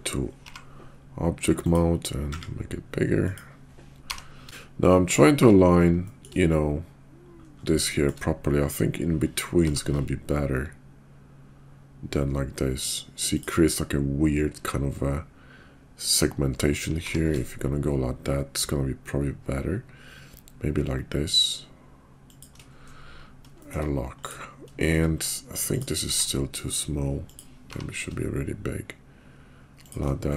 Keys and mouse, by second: 0.4 g, 2.3 s, 4.0 g, 5.2 shift+click, 6.0 shift+click, 8.0 shift+click, 9.7 g, 17.0 g, 23.6 shift+click, 24.8 shift+middle click, 25.7 click, 26.0 s, 27.6 g.